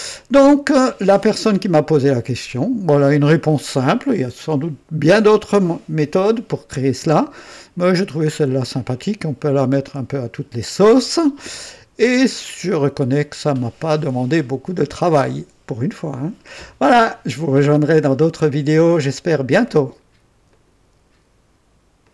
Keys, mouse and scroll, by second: 0.1-2.6 drag, 7.3-8.2 right drag, 20.5 right click, 22.0 click.